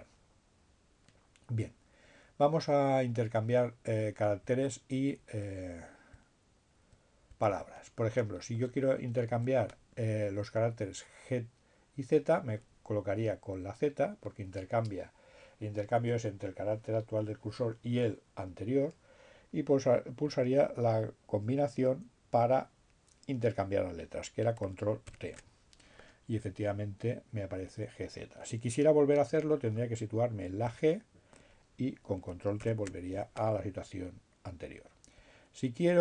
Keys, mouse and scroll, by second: 0.5 Left, 5.9 Right, 7.7 Right, 8.7 Right, 21.5 ctrl+t, 30.1 Left, 32.5 ctrl+t, 34.3 Left.